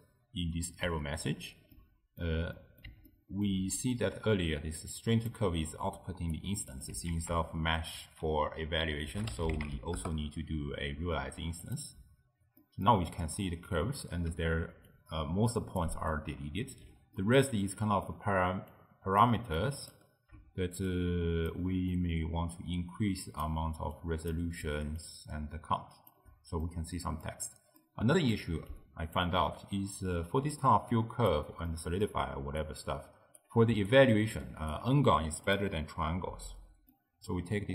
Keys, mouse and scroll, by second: 1.8-4.8 middle drag, 4.8-6.5 typing, 5.0-5.3 drag, 6.0 right click, 6.6 middle click, 7.2 ctrl+a, 12.6-14.4 middle drag, 14.4-16.9 typing, 14.9 click, 17.2-18.8 middle drag, 18.8 click, 19.6 click, 20.9-24.1 shift+drag, 25.0-26.7 shift+drag, 26.7-28.8 middle drag, 28.8 click, 30.5-34.8 typing, 30.6 click, 31.8-32.4 middle drag, 32.7-33.3 right drag, 33.9 right click, 35.5 click, 36.9 middle click, 37.5-37.7 scroll down 1.